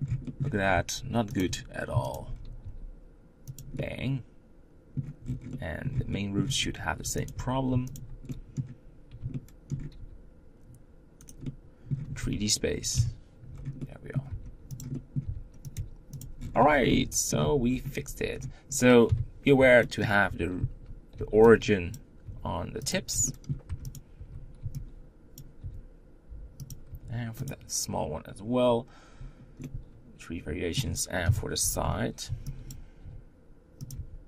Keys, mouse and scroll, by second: 0.3 scroll up 3, 0.5 Tab, 1.1 click, 1.2 Tab, 1.9 alt+click, 2.1-2.4 scroll down 2, 2.4 g, 3.5-5.0 middle drag, 5.0 scroll down 6, 5.3-6.3 middle drag, 6.3-6.8 scroll up 1, 6.8 Tab, 7.0 click, 7.2 Tab, 7.7 alt+click, 8.0-9.5 middle drag, 9.5 scroll up 1, 9.8 g, 11.3-12.7 middle drag, 12.7 KP_Decimal, 13.3 scroll down 1, 13.5 middle click, 14.0 g, 14.7 middle click, 15.0 r, 15.5 g, 16.1-16.7 scroll down 12, 16.7 middle click, 17.2 Tab, 17.6-18.8 scroll down 3, 18.8 KP_1, 19.6 shift+middle click, 20.0 Tab, 20.6 z, 21.7 b, 22.0 g, 23.0 shift+middle click, 23.5 Tab, 23.7 click, 23.9 Tab, 25.4 g, 26.7 Tab, 27.2 click, 29.4-31.0 middle drag, 31.0 KP_3, 31.4 Tab, 32.5 b, 32.8 g, 33.7 Tab.